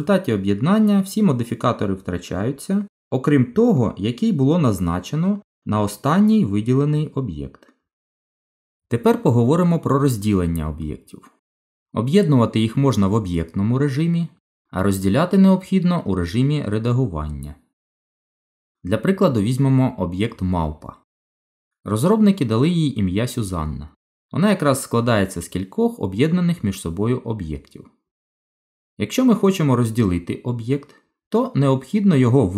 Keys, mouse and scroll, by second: 18.1 Delete, 20.0 shift+a, 22.8 middle click, 23.6-24.2 scroll up 4, 24.2 middle click, 26.5 click.